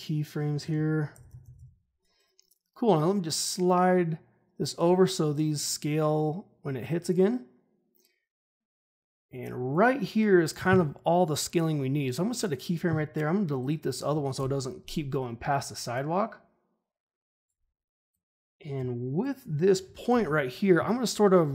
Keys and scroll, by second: 14.3 Delete, 20.0 ctrl+shift+h.